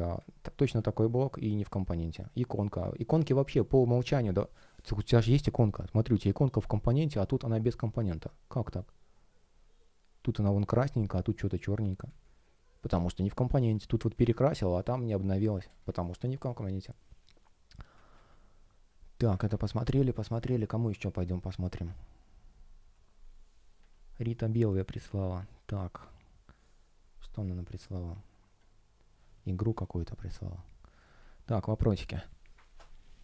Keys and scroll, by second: 12.0 space, 18.0 super+w, 19.4 super+w.